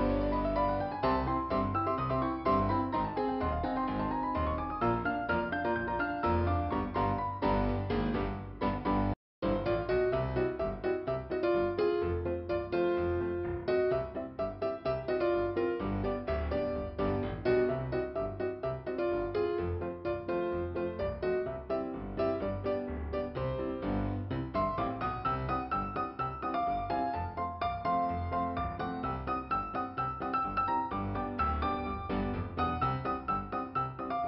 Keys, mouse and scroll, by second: 1.3 click, 4.8 click, 6.4 click, 9.6 f, 10.6 middle click, 11.4-12.5 scroll up 2, 12.9 click, 21.9 click, 22.6 click, 23.3 click, 24.7 click, 25.0 click, 25.4 click, 25.5 click, 26.4 click, 27.1 middle click, 28.1 click.